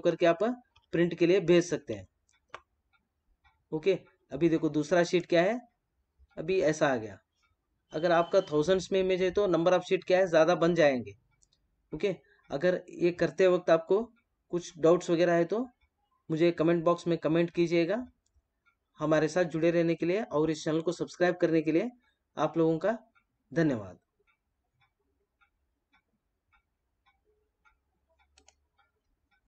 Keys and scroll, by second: 0.8 ctrl+=.